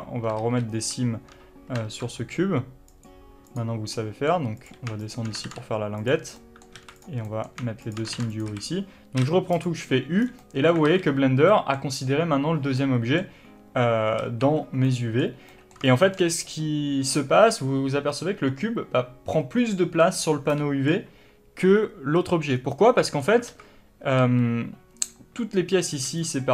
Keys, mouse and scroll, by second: 0.7 ctrl+z, 3.8 click, 4.2 middle click, 4.9 click, 5.3 shift+click, 5.8 ctrl+e, 6.7 middle click, 7.1 alt+a, 7.3 click, 7.6 middle click, 8.1 shift+click, 8.4 ctrl+e, 8.8 a, 10.6 scroll down 2, 10.7-14.3 middle drag, 11.2 alt+a, 11.4-11.8 scroll up 2, 14.3 alt+a, 15.2 middle click, 16.0-20.2 shift+middle drag, 20.8 middle click, 22.8 scroll down 1, 23.1 middle click, 23.8 alt+a.